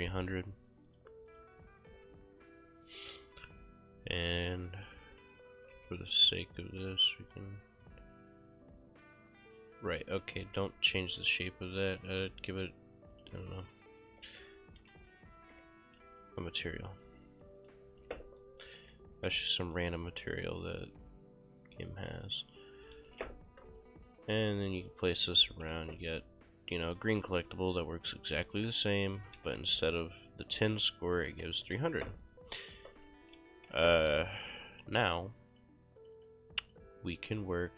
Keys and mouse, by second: 1.0 click, 4.5 click, 5.6 e, 5.8 r, 6.3 click, 10.5 w, 11.4 click, 13.2 click, 14.1 right click, 14.2 w, 14.9 s, 15.6 w, 16.9 click, 17.5 right click, 17.9 ctrl+shift+s, 18.7 right click, 18.9 s, 19.4 w, 22.2 click, 22.6 right click, 23.1 ctrl+space, 23.8 click, 24.9 click, 25.6 ctrl+c, 25.8 ctrl+v, 26.3 click, 27.7 click, 28.2-33.2 typing, 28.4 right click, 32.9 right click, 33.8 ctrl+space, 34.2 click.